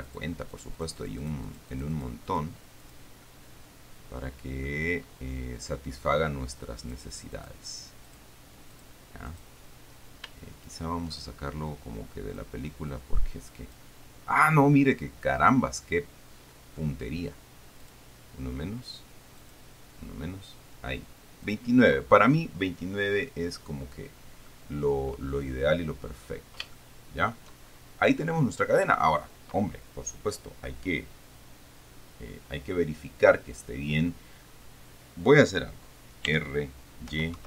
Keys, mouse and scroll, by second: 0.8-2.5 drag, 2.6 click, 3.1 click, 3.7-5.1 middle drag, 7.1 click, 7.6 click, 8.3 click, 9.0 click, 9.6 click, 10.9 shift+right click, 12.8-14.2 drag, 15.7 right click, 18.1 click, 19.7 click, 21.7 click, 23.5-24.9 middle drag, 25.7-26.8 scroll down 1, 26.8 scroll up 1, 27.0-28.1 shift+middle drag, 28.1-28.7 shift+scroll up 1, 36.6 r, 37.3 y.